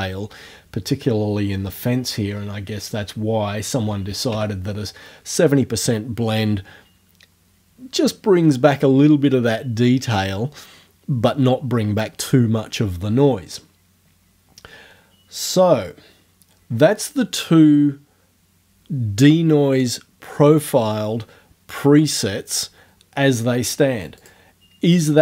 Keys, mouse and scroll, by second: 2.9 right click, 3.7 KP_7, 3.9 KP_0, 4.3 KP_Enter, 24.2 click.